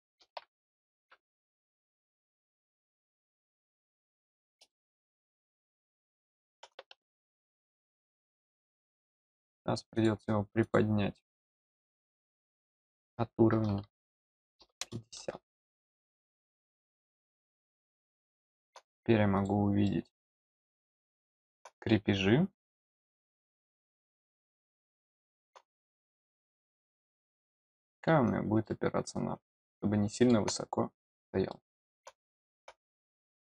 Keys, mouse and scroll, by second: 1.7 scroll up 1, 3.7 click, 4.2 scroll down 1, 4.6-6.5 middle drag, 8.8 click, 9.9 click, 10.6 click, 17.6-18.6 middle drag, 19.3 click, 19.8 middle click, 20.6 middle click, 23.3 click, 24.5 click, 24.9 middle click, 26.7 click, 27.4 scroll down 1, 28.6-30.2 middle drag, 30.5 scroll down 1, 31.4 middle click, 32.2 middle click, 33.1 scroll up 1.